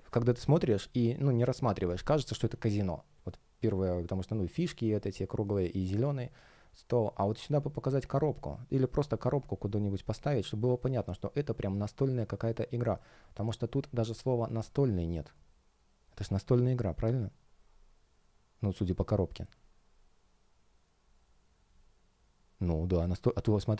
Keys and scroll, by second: 17.6 alt+l.